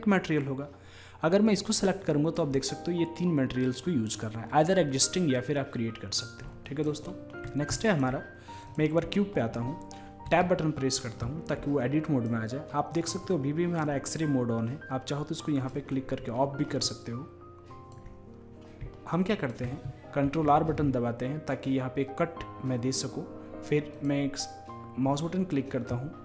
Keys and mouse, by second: 1.5-9.2 drag, 9.2-10.3 middle drag, 10.3 Tab, 10.3 click, 15.1 middle click, 18.6-21.2 drag, 20.3 ctrl+r.